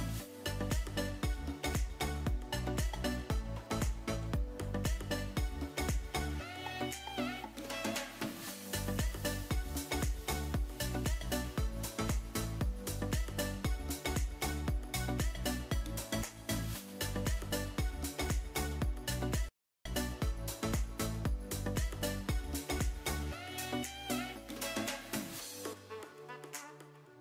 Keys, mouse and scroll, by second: 1.5 click, 2.3-7.7 drag, 9.8 click, 12.0 click, 13.3 click, 15.5 KP_3, 17.2 click, 19.5 s, 20.6 s, 20.7 click, 26.4 shift+middle click.